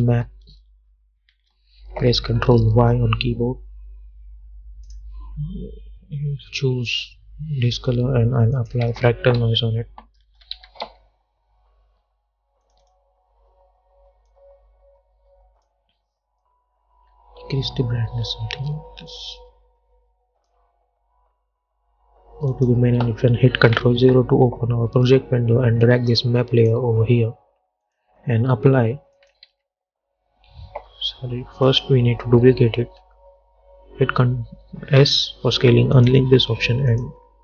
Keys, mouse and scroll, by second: 0.0-0.7 typing, 1.4 Return, 2.8 ctrl+y, 5.0 click, 7.0 Return, 8.7 click, 9.0 ctrl+a, 9.5-11.4 typing, 12.8-22.6 drag, 24.1 ctrl+0, 26.0-28.0 drag, 29.6 ctrl+a, 31.8 click, 33.1 ctrl+d, 35.1 s, 36.1 click.